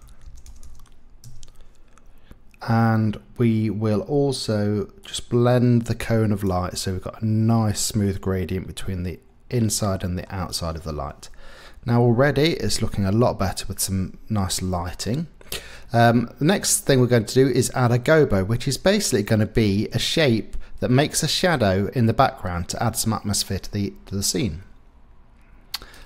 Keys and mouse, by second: 0.4 KP_0, 1.2-5.1 middle drag, 6.8-9.8 middle drag, 9.9 click, 10.2-15.2 middle drag, 11.2 KP_0.